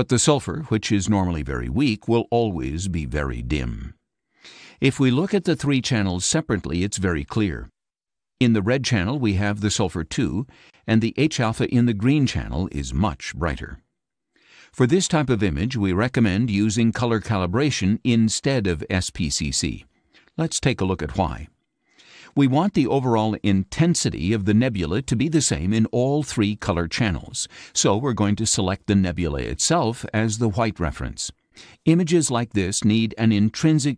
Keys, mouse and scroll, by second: 2.1 scroll up 2, 6.6 click, 8.5 click, 9.9 click, 11.0 click, 27.1 click, 27.8 click, 31.7 click.